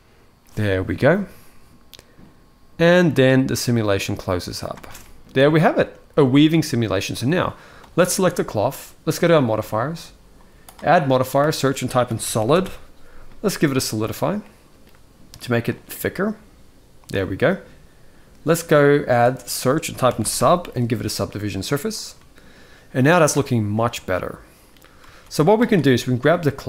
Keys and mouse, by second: 4.5 space, 4.7-5.1 middle drag, 5.3 shift+middle drag, 6.1 ctrl+s, 6.4-6.9 middle drag, 7.5 click, 9.1 click, 10.4-13.6 drag, 14.1 middle click, 15.5-16.8 shift+drag, 18.3-21.5 drag, 21.9-22.9 middle drag, 23.1 alt+a, 23.4-24.4 middle drag, 24.8 ctrl+s, 25.4 click.